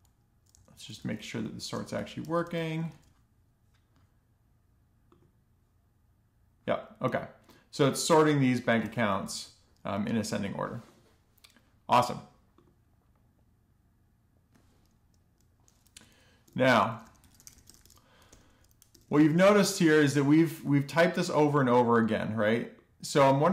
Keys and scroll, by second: 0.0 Left, 0.0 Left, 0.1 Left, 0.1 Left, 0.1 Left, 0.5 Left, 0.8 super+v, 1.3 super+z, 1.6 Left, 1.7 super+v, 2.0 ,, 2.2 alt+shift+f, 2.7 super+s, 7.7 BackSpace, 7.8 alt+shift+f, 8.6 alt+shift+f, 9.0 super+s, 15.6-18.0 typing, 18.3 Down, 18.6 Return, 18.7 Return, 18.9 alt+shift+f, 19.3 super+s.